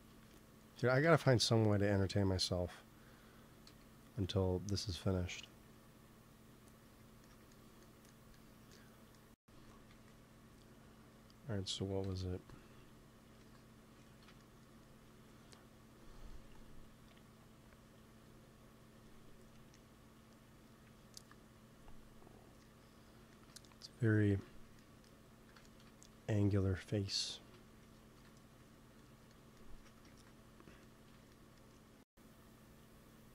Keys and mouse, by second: 0.9 shift+c, 1.1 f, 1.9 f, 3.6 f, 5.0-6.4 middle drag, 9.4-11.1 drag, 9.8 ctrl+s, 12.0 KP_1, 13.2 ctrl+s, 15.9-18.4 drag, 21.1-23.1 drag, 23.2-24.4 middle drag, 25.2 x, 25.9 f, 26.0-28.9 drag, 28.0 KP_1, 30.0 ctrl+s, 32.3-33.3 drag.